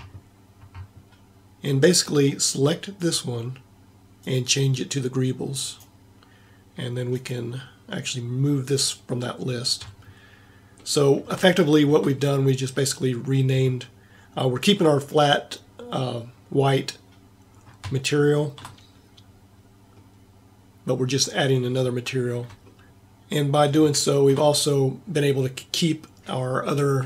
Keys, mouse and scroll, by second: 8.9-10.9 middle drag, 20.9 middle click, 22.2-23.3 middle drag, 24.1 middle click.